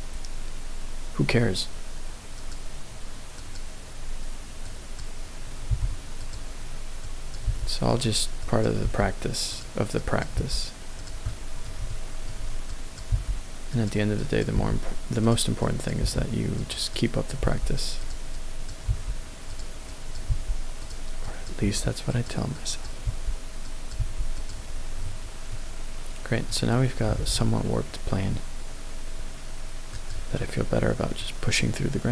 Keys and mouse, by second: 4.7 click, 5.7 g, 7.1 click, 7.5 g, 7.9 click, 8.5 click, 8.8 g, 9.5 click, 10.0 click, 10.4 g, 11.8 shift+middle click, 12.7 click, 13.1 g, 13.7 click, 14.2 click, 14.6 g, 15.2 click, 15.7 click, 16.1 g, 16.5 click, 17.0 click, 17.5 g, 18.0 click, 18.3 click, 18.9 g, 19.8 click, 20.3 g, 21.2 click, 21.6 g, 22.1 click, 22.5 click, 23.0 g, 23.7 click, 24.0 g, 24.4 click, 25.1 Tab, 25.5-26.9 middle drag, 27.1 g, 30.0 click.